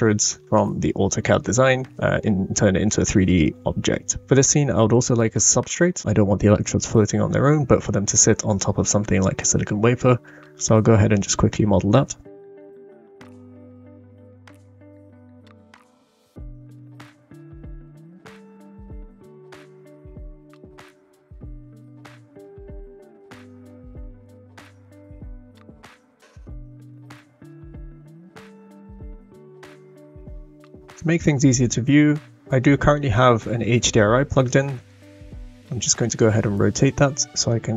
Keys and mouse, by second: 0.4-1.4 shift+middle drag, 2.2-3.0 middle drag, 12.0 shift+s, 13.1 s, 13.9 s, 14.9 right click, 15.2 shift+right click, 15.5 g, 16.9 shift+right click, 17.3 g, 17.9 g, 19.2 shift+click, 19.6 g, 20.6 click, 20.6 right click, 21.4 click, 23.0 click, 25.6 click, 25.7 middle click, 26.2 middle click, 26.3 click, 26.3 right click, 26.8-28.1 middle drag, 28.8-29.2 middle drag, 29.6 middle click, 33.9 middle click, 35.6-37.0 drag.